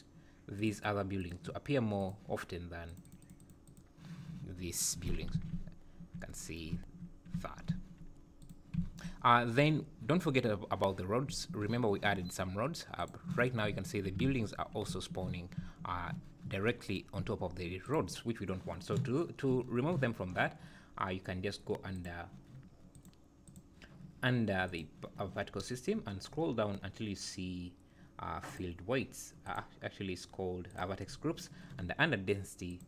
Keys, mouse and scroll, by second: 0.5 click, 0.7 click, 1.2 click, 2.0-3.2 click, 2.8 click, 3.0 click, 3.4 click, 3.6 click, 4.7 click, 5.3 alt+a, 5.5 `, 6.7 `, 7.3 `, 7.6 `, 8.4 click, 9.4 scroll up 1, 11.2 `, 11.4 `, 13.0 click, 14.2 alt+a, 14.8 `, 15.6 `, 17.9 click, 20.9-22.0 scroll down 4, 22.0 click, 23.0 click, 23.5 click, 24.7 click, 25.6-26.6 scroll down 20, 28.5 click, 29.5 click, 30.7 click, 31.1-32.0 scroll down 3, 32.0-32.3 scroll down 4, 32.7 click.